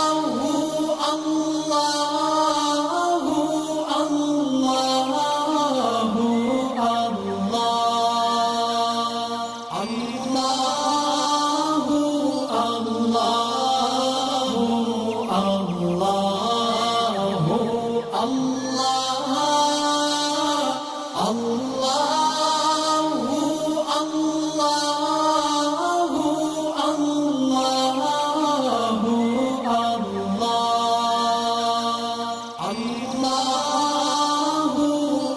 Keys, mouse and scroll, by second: 1.0 alt+scroll down 1, 2.6 alt+scroll up 1, 3.1 space, 3.2 click, 3.9 alt+scroll up 1, 4.5 click, 4.9 shift+click, 8.9 shift+click, 10.6 ctrl+g, 12.0 alt+scroll down 1, 12.3 space, 12.3 click, 14.2-14.9 alt+click, 14.6 right click, 15.7 click, 17.8-18.1 alt+scroll up 2, 18.4-19.6 drag, 19.8 space, 20.1 click, 20.3 space, 21.0 click, 21.1 space, 23.5 click, 25.4 alt+scroll up 1, 26.0 space, 26.0 click, 26.1 click.